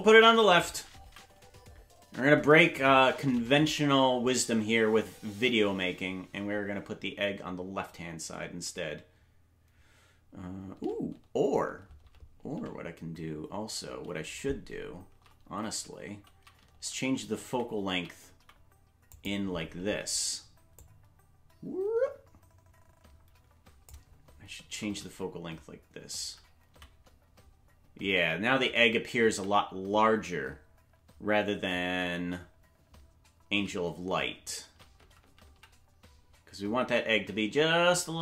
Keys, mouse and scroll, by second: 20.8-23.9 drag, 24.6 shift+`.